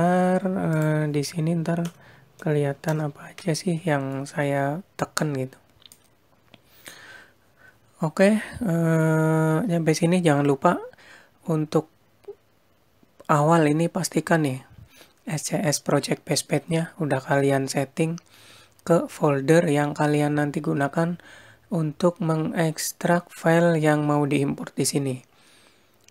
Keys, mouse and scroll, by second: 4.8 click, 7.6 click, 9.4-9.7 scroll up 4, 9.7-10.1 scroll down 4.